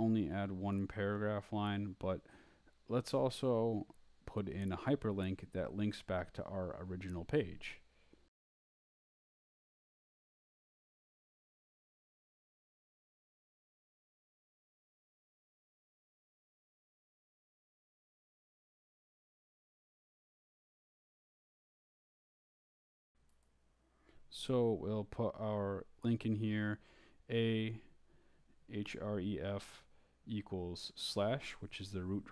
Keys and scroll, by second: 0.0-0.3 typing, 0.5 shift+Return, 1.1 Up, 1.6 shift+Up, 1.7-3.9 typing, 4.5 Return, 5.5 shift+Up, 6.3 Return, 6.9 Right, 7.4 Down, 7.7 Left, 8.3 Return, 8.7 Up, 9.1-10.3 typing, 14.8-16.9 typing, 18.3-19.9 typing, 20.1 shift+Left, 21.1 /, 21.7 Left, 23.2 Right, 24.1 Return, 24.9 Up, 25.8 Down, 26.3 Up, 27.0-30.6 typing, 32.0 /.